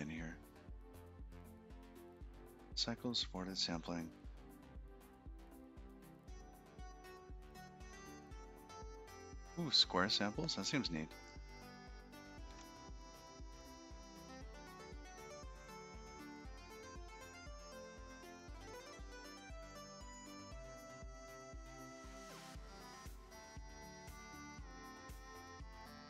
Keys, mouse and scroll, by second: 2.1 scroll up 7, 6.0-6.4 scroll down 5, 7.2 click, 7.6-8.0 scroll down 3, 9.2 scroll down 6, 10.4 scroll up 3, 12.1 scroll down 1.